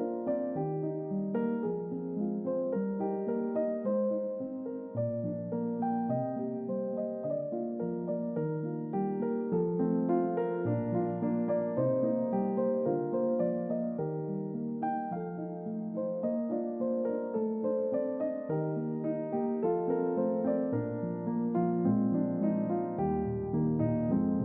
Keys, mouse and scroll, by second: 10.3 click, 13.5 click, 14.5 click, 15.5-18.3 drag, 18.8 click, 21.3-24.4 drag.